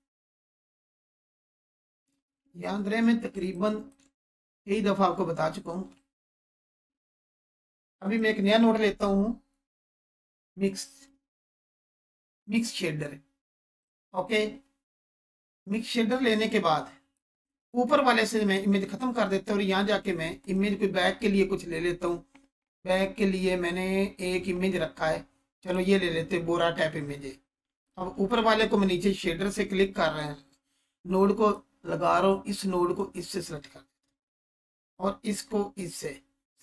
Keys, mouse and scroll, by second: 0.7-1.0 alt+shift+drag, 2.1 ctrl+space, 3.5-4.1 alt+shift+click, 4.7-5.9 scroll down 1, 6.7 shift+a, 8.0 click, 9.7 m, 11.9-12.6 typing, 12.3-16.3 drag, 20.8 scroll down 1, 25.6-30.3 drag, 25.6 scroll down 1.